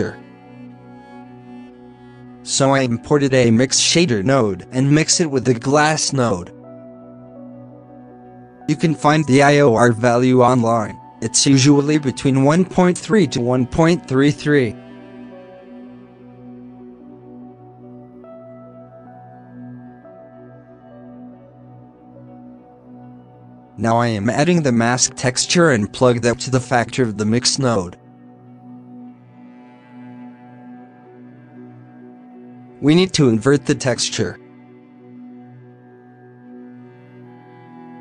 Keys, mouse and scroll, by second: 0.0 b, 0.7 alt+a, 0.9 middle click, 1.0 scroll up 3, 3.3 middle click, 3.6-4.0 scroll up 5, 4.0 shift+a, 7.0 scroll up 5, 7.6-8.3 drag, 8.3 middle click, 8.5 scroll up 2, 8.9 click, 9.8 KP_3, 12.9 KP_3, 13.8 click, 14.4 scroll down 9, 14.7 middle click, 15.0 scroll up 1, 15.4-16.5 drag, 16.5 scroll down 5, 16.8 alt+a, 17.0 b, 18.0 alt+a, 19.2 shift+a, 20.4 click, 20.6 shift+d, 21.2 middle click, 21.3 scroll up 8, 22.1 click, 23.3-25.0 drag, 25.6 click, 26.2 scroll down 2, 26.6 middle click, 26.9 g, 27.8 middle click, 28.0 scroll up 2, 28.2 alt+a, 31.5 scroll down 1, 31.8 shift+middle click, 32.5 shift+a, 35.5 alt+a, 36.0 middle click, 36.8-37.4 drag, 37.4 alt+a, 37.7 middle drag, 37.9 scroll up 2.